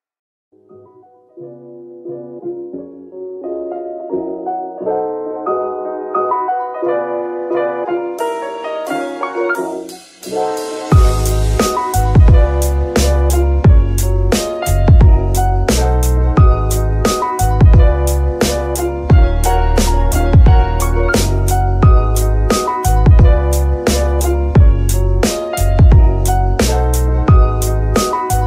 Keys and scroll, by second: 0.3 Tab, 1.7 Tab, 2.6 shift+s, 4.0 shift+n, 10.1 g, 14.7 g, 15.5 Escape, 16.1 g, 16.6 Escape, 19.1 ctrl+F2, 19.3 c, 19.9 Escape, 22.2 g, 25.3 g, 27.9 Escape.